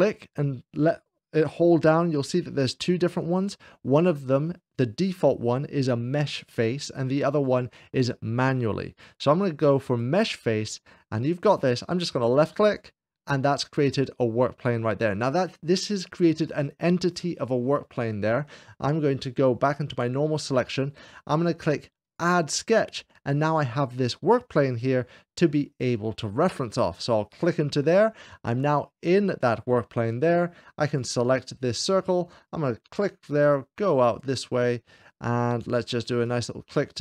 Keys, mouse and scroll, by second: 12.5 click, 13.8-15.8 scroll down 2, 19.7-20.8 drag, 20.0 scroll down 1, 21.8-22.9 drag, 27.1-28.2 drag, 28.2 middle click, 28.7 scroll down 3, 29.0 scroll up 2, 30.7-31.8 drag, 32.3-34.0 drag, 35.9-37.0 drag.